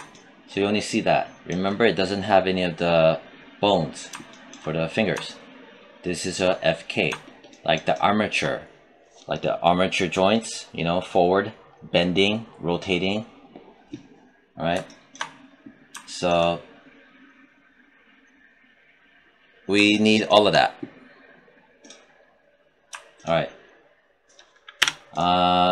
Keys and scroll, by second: 24.7 z.